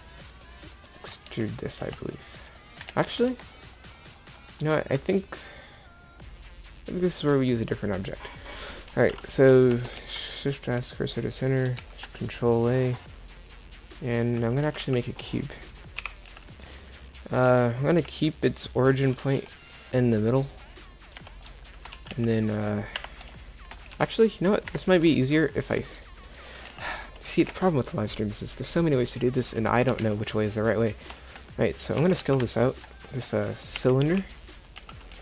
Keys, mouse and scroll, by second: 1.3 e, 2.9 ctrl+z, 3.3 Tab, 10.0 shift+s, 11.8 shift+a, 14.7 g, 16.0 KP_7, 16.3 z, 17.5 Tab, 18.0 a, 19.0 c, 21.9 g, 23.9 Tab, 24.7 Delete, 26.7 z, 27.4 shift+a, 29.9 g, 32.0 s, 33.8 KP_1, 34.1 KP_7, 34.8 z, 35.1 s.